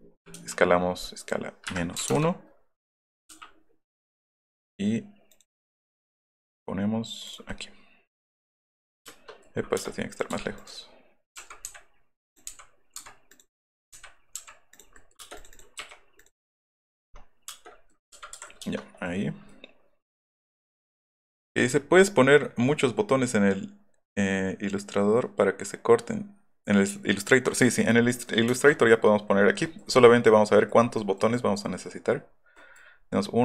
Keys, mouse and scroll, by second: 0.4 s, 1.2 click, 2.0 KP_1, 2.1 Return, 5.3 click, 7.5-8.7 middle drag, 9.4 middle click, 9.7 space, 10.1 click, 10.3 ,, 10.6 click, 12.3 click, 13.4 middle click, 13.8 middle click, 15.0 middle click, 15.2 space, 17.5 space, 17.9 middle click, 18.4 Escape, 18.5 shift+middle click, 19.5 middle click, 22.4 F3, 27.7 middle click, 27.8 scroll, 28.3-29.0 scroll, 29.6 middle click, 29.8 middle click, 30.8 middle click, 32.1 middle click.